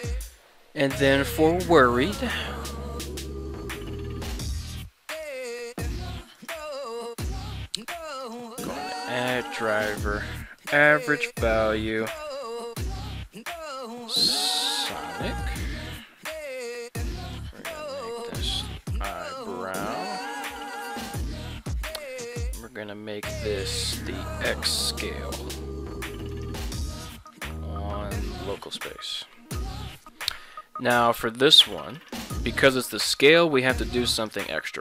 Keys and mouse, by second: 4.9 ctrl+Tab, 5.2 right click, 6.4-34.8 right drag, 14.9 Down, 19.9 Left, 20.1 Left, 20.6 Down.